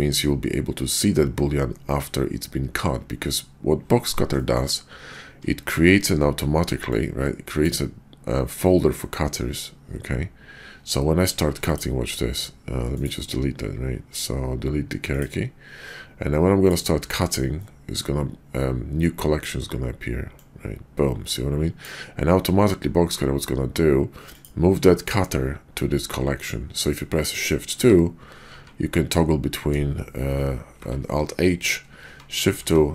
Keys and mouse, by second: 4.3 shift+middle drag, 11.5 x, 12.9-17.2 drag, 17.2-20.3 middle drag, 20.3-27.4 drag, 27.7 shift+2, 30.7 alt+h, 31.9-32.9 shift+2.